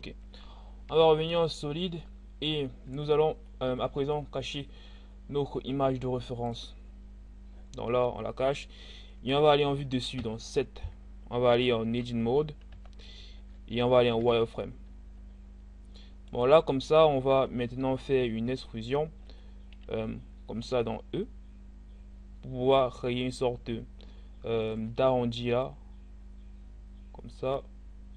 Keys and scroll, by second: 0.5 z, 9.7 7, 12.7 Tab, 14.1 z, 20.1 e, 24.5 e.